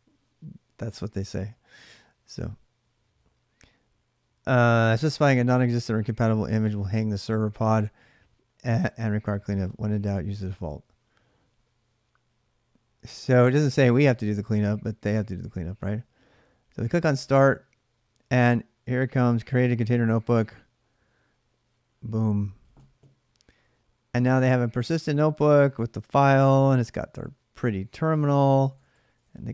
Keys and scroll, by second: 28.2-29.5 typing.